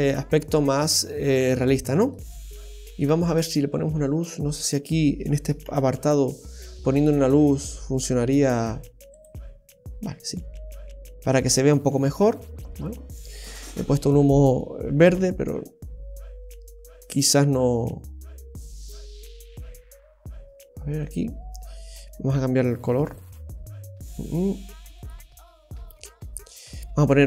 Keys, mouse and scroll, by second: 2.4-2.8 scroll up 1, 2.8 middle click, 3.3-3.9 scroll down 2, 4.7 click, 5.7 shift+a, 11.0-11.9 scroll up 3, 11.5 middle click, 12.1-12.7 scroll up 1, 13.2-13.6 scroll down 1, 13.7 middle click, 18.9 click, 21.0 right click, 21.6 scroll down 1, 22.1-22.5 scroll down 11, 23.0-23.5 scroll down 9, 25.0 right click, 26.5 click.